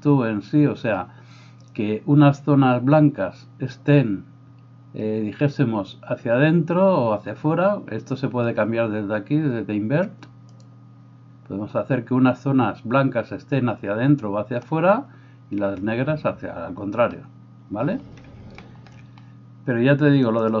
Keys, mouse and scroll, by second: 10.6-20.6 middle drag.